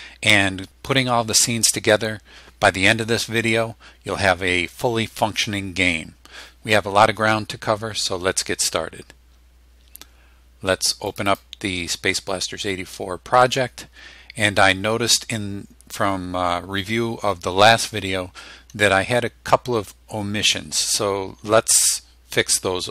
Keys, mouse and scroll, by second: 11.1 click.